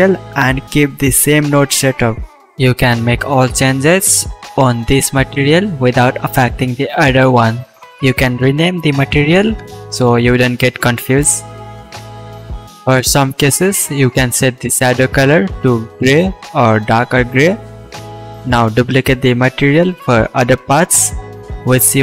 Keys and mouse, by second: 1.2-1.6 shift+drag, 3.3-3.9 shift+drag, 6.1-8.9 drag, 8.9 Left, 11.4-14.6 drag, 14.6 middle drag, 15.0 middle click, 15.7-16.9 middle drag, 16.9-20.3 drag.